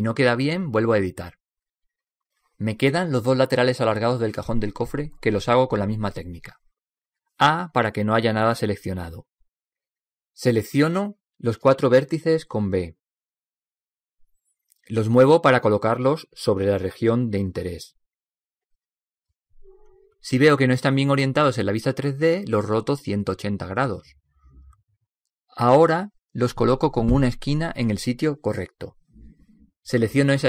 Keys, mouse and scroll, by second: 0.7 Tab, 2.4 s, 6.0-7.8 middle drag, 7.9 middle click, 9.2 a, 13.4 b, 16.0 b, 18.0 g, 21.8-23.5 middle drag, 23.8 g, 27.6 r.